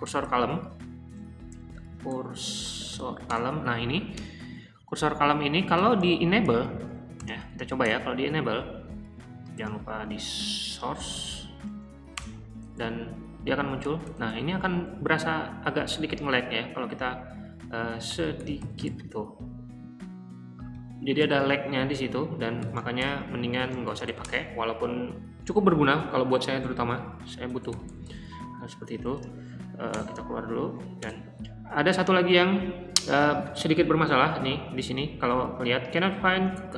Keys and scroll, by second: 0.2-3.3 typing, 4.1 Return, 4.3-7.8 typing, 9.6 typing, 10.6 Down, 10.8-12.1 typing, 13.2-16.1 typing, 17.6-19.3 typing, 20.7 Escape, 20.9-24.7 typing, 27.5-28.0 typing, 29.0-29.7 typing, 29.9 Return, 30.7 Up, 30.9 Return.